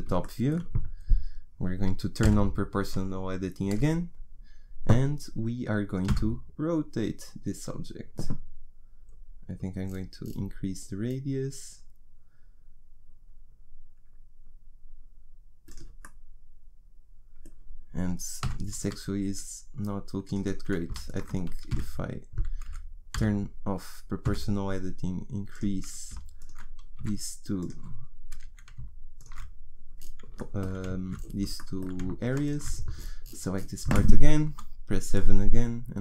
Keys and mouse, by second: 2.2 o, 6.0 r, 18.4 g, 21.0-23.1 right drag, 21.7 s, 23.1 o, 24.3 s, 26.5 click, 27.0 s, 32.4-34.5 middle drag, 34.5 KP_7.